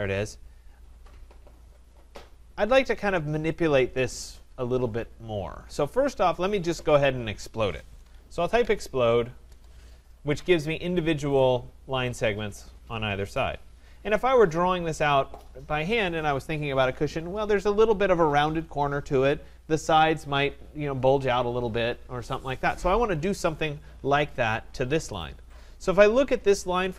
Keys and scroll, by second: 9.4 Return.